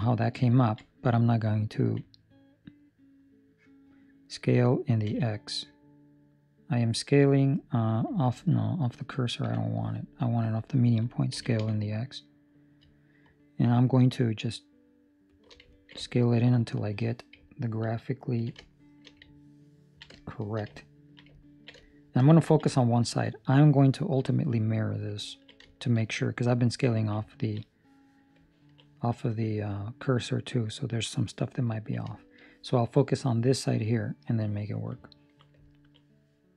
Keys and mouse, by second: 0.0 shift+middle click, 0.4 ctrl+middle click, 1.8 s, 9.3 ., 11.3 s, 15.7 ctrl+middle click, 16.9 shift+middle click, 17.7 ctrl+middle click, 18.0 ctrl+middle click, 19.0 shift+middle click, 20.4 shift+middle click, 20.7 ctrl+middle click, 21.4 ctrl+middle click, 22.1 ctrl+middle click, 22.3 ctrl+middle click, 22.7 shift+middle click, 25.2 ctrl+middle click, 25.6 shift+middle click, 27.2 ctrl+middle click, 28.4 ctrl+middle click, 31.5 ctrl+middle click, 32.1 shift+middle click, 34.9 ctrl+middle click, 35.5 ctrl+middle click.